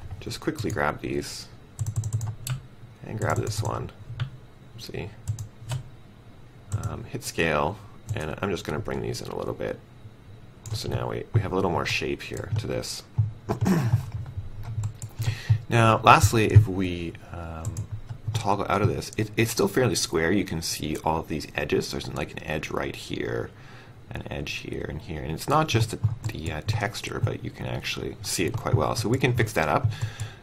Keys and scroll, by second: 7.2 r.